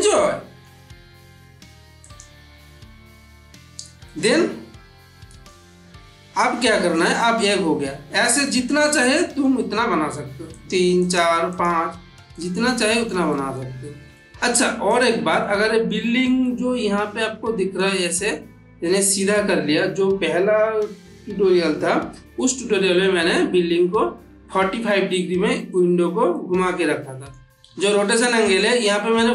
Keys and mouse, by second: 1.9 click, 3.9-5.5 middle drag, 8.2-9.3 middle drag, 10.4 click, 12.2 ctrl+middle click, 14.1 shift+middle click, 14.7 click, 15.2-15.8 ctrl+middle drag, 22.3-23.5 middle drag, 26.2-27.5 middle drag, 27.5 click, 27.9 ctrl+z.